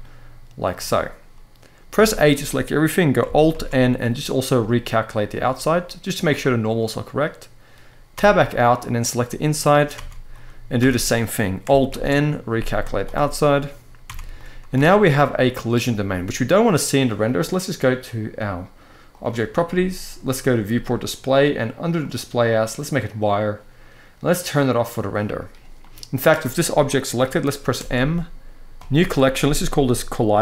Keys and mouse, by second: 1.7 a, 3.2 alt+n, 6.2-6.7 middle drag, 7.9 Tab, 9.0 middle click, 9.7 Tab, 10.1 middle click, 10.5 a, 11.6 alt+n, 13.8 Tab, 14.1-14.5 middle drag, 14.5 alt+a, 14.8 click, 15.2-15.5 middle drag, 20.3 click, 21.7-22.9 drag, 24.5 click, 25.5 middle drag, 27.5 m.